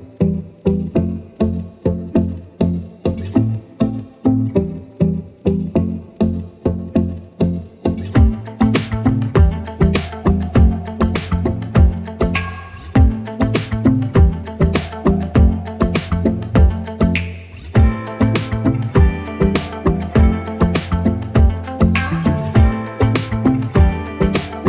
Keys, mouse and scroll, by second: 2.9 scroll down 1, 3.3 scroll up 1, 4.2 click, 6.4 scroll up 1, 8.1 scroll down 1, 9.4 click, 11.3 ctrl+click, 12.0 scroll down 1, 12.6-13.2 scroll up 2, 16.0 click, 19.7 ctrl+z, 20.3 ctrl+z, 20.8 click.